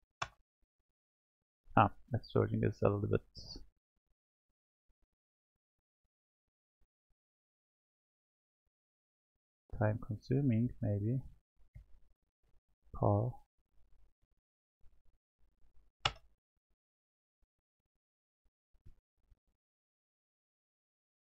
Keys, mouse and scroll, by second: 6.0-9.1 drag, 10.8 BackSpace, 11.0 BackSpace, 11.3 BackSpace, 20.2 click, 20.9 click.